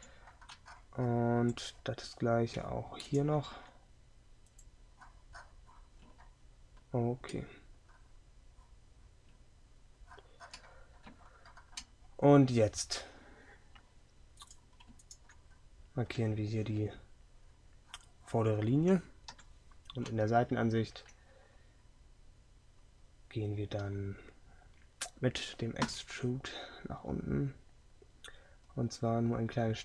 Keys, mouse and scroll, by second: 0.3 middle click, 3.6 x, 19.4 KP_3, 22.9 middle click, 25.9 e.